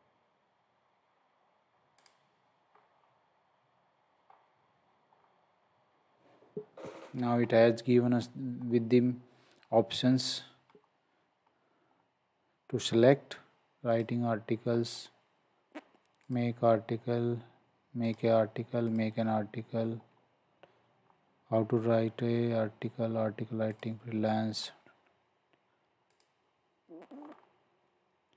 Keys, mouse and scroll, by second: 2.0 click, 2.7-3.1 scroll down 1, 7.4 scroll up 1, 11.9-12.9 scroll down 1, 13.9 click, 15.0 scroll down 1, 16.2 click, 20.1 scroll down 1, 23.7 click, 24.6 scroll down 1, 27.2-27.7 scroll down 1.